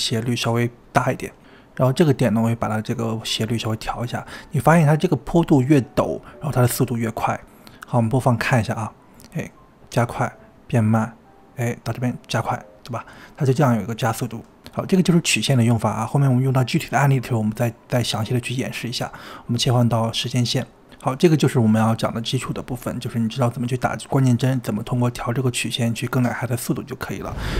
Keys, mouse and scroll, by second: 0.7 space, 1.9 click, 3.8 click, 7.9-9.1 drag, 9.1 space, 13.1 space, 17.8-20.8 drag, 21.4 click, 22.4 space, 26.3 space.